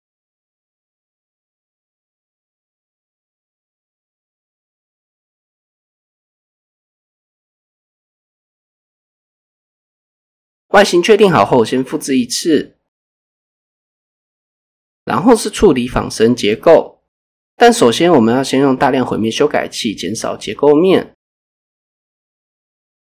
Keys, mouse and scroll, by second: 0.6 alt+click, 0.9 s, 2.1 click, 2.5-3.4 scroll down 3, 2.9 shift+middle click, 3.2 Tab, 3.4-5.4 scroll up 2, 5.9 click, 7.0 click, 8.8 click, 9.8 click, 10.9 shift+d, 11.2 right click, 12.7 click, 14.3 click, 14.7 click, 16.2 click, 17.3 click, 18.2-21.5 drag.